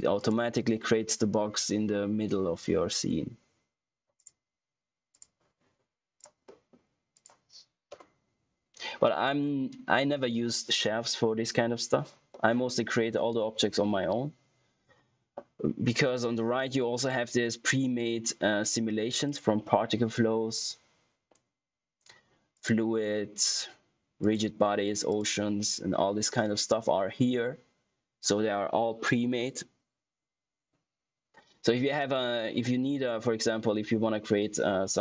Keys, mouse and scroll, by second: 4.1 click, 6.4 middle click, 7.1 click, 12.2 middle click, 19.2 click, 22.5 click.